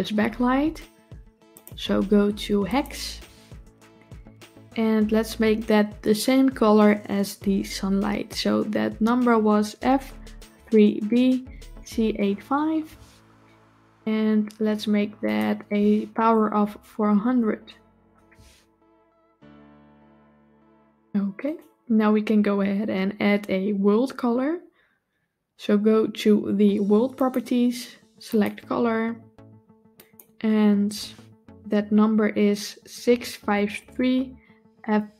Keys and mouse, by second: 1.4 click, 15.1-17.9 drag, 21.3 click, 27.1 click, 28.1 click.